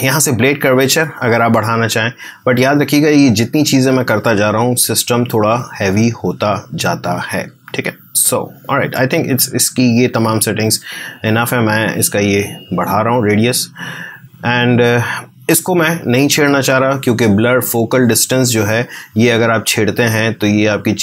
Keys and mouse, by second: 11.6-16.3 drag, 18.4-21.0 drag.